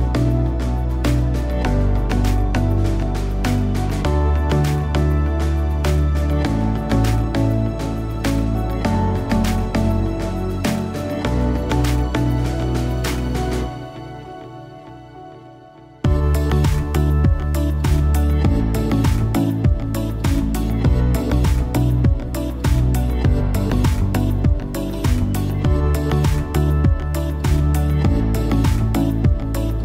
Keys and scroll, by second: 21.2 a.